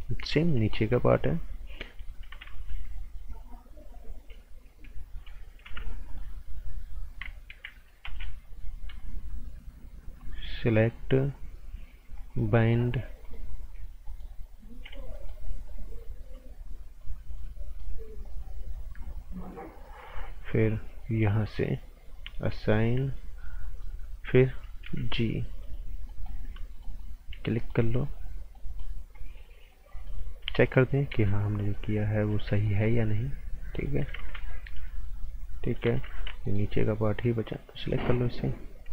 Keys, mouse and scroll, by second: 0.4 right click, 2.4 ctrl+z, 5.6 b, 6.1 click, 8.0 g, 9.0 ctrl+click, 12.3 click, 14.0 ctrl+right click, 15.1 alt+right click, 17.0 ctrl+click, 22.2 click, 22.5 right click, 23.4 right click, 24.8 b, 25.6 click, 26.1 right click, 26.7 ctrl+right click, 27.6 alt+right click, 28.5 right click, 31.1 z, 31.6 click, 32.3 z, 32.6 right click, 33.0 click, 34.1 ctrl+z, 34.6 click, 36.4 alt+right click, 37.7 click.